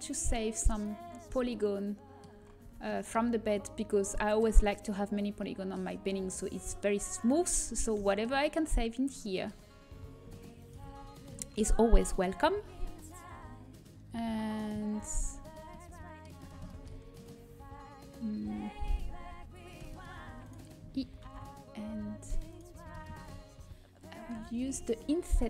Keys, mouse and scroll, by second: 0.9-2.8 middle drag, 1.2 z, 2.8 a, 7.0-13.7 middle drag, 8.0-9.1 drag, 8.0-10.3 right drag, 10.5-12.9 right drag, 12.9-15.1 drag, 15.8-18.7 middle drag, 20.0 e, 22.4 shift+y, 22.4-24.4 drag, 23.0 ctrl+z, 24.4 ctrl+z.